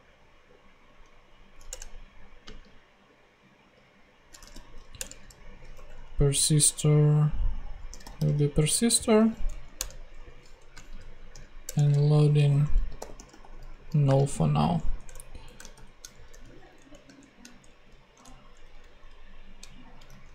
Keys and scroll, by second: 0.0-0.2 typing, 1.6 Return, 2.4 space, 4.1-5.7 typing, 7.6-8.5 typing, 9.4 Down, 9.7 Return, 10.5 Right, 11.6 Return, 12.2-15.7 typing, 13.7 super+Right, 14.0 super+space, 16.3 shift+Return, 16.7 Down, 17.8 Up, 18.2 shift+Down, 18.8 alt+shift+Up, 20.1 alt+shift+super+z.